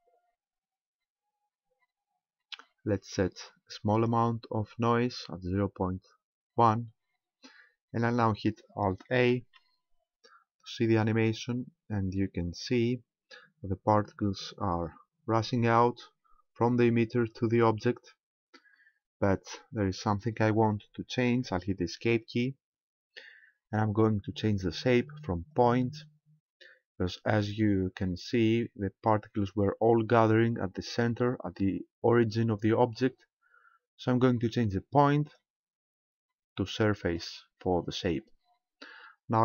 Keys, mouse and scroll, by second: 3.9 click, 6.3-8.5 scroll down 4, 8.5 scroll down 1, 9.3 alt+a, 22.3 Escape, 25.5 click, 35.2 click.